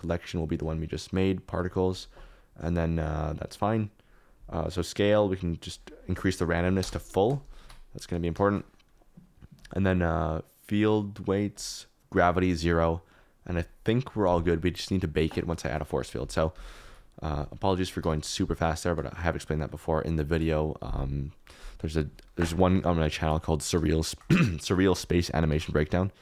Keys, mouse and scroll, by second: 0.5-1.7 drag, 4.0 click, 4.8-5.9 drag, 6.8 KP_0, 7.8 ctrl+s, 8.4 shift+middle click, 9.5 click, 11.5 click, 12.2 click, 15.3 click, 15.6 shift+a, 16.8 alt+z, 18.0 d, 19.5 middle click, 25.4 shift+a.